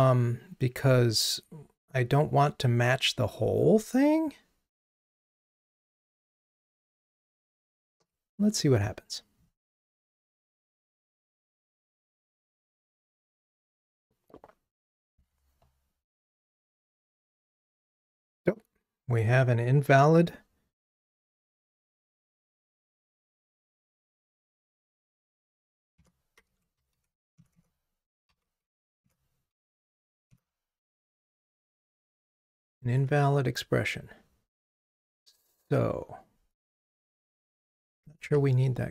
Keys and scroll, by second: 7.6 ctrl+r, 38.2 ctrl+r.